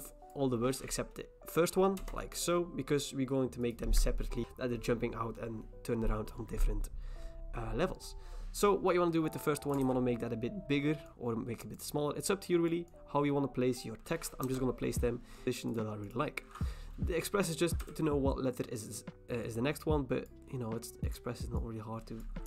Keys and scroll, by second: 2.0 BackSpace, 9.8 ctrl+t, 14.4 Return, 17.8 p.